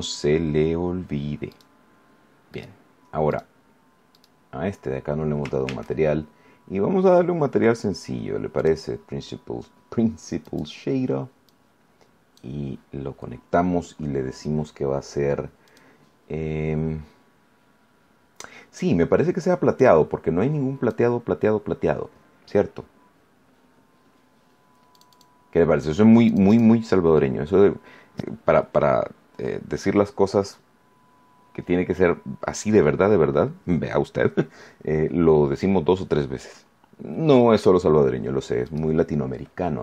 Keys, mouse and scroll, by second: 0.1 shift+scroll up 3, 1.5 right click, 2.5 right click, 3.3 right click, 4.1 right click, 5.6 shift+a, 8.5 click, 10.4 click, 11.4-12.5 drag, 15.6 click, 19.7-21.0 drag, 24.9 click, 26.2 click, 38.6 right click, 39.3-39.7 scroll down 1.